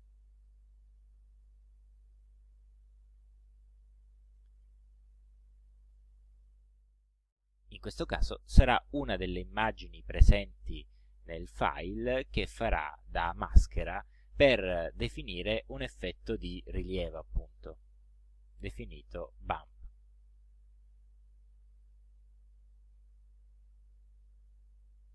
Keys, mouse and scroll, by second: 0.5 click, 3.4 click, 4.7 click, 5.9 click, 7.5 click, 17.9 click, 18.9 click, 23.2 click.